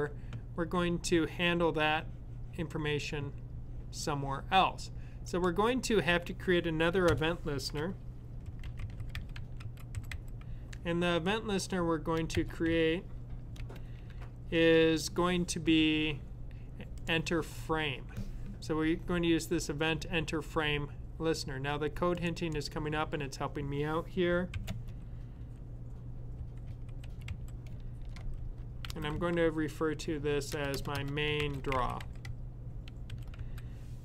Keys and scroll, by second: 8.3-10.6 typing, 12.1-12.5 typing, 25.9-29.0 typing, 30.3-33.7 typing.